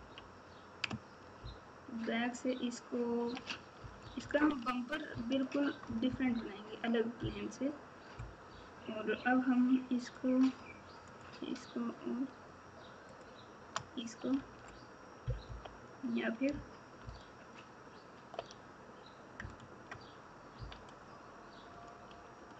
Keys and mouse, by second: 0.0 KP_6, 1.3 ctrl+KP_4, 3.8 KP_Subtract, 4.0 KP_Subtract, 4.2 KP_Subtract, 5.1 ctrl+KP_8, 5.8 KP_Add, 6.0 KP_Add, 6.2 KP_Add, 7.1 KP_4, 11.0 shift+click, 13.0 shift+click, 14.3 alt+z, 15.4 KP_7, 17.0 ctrl+KP_8, 19.3 KP_Add, 20.5 KP_9.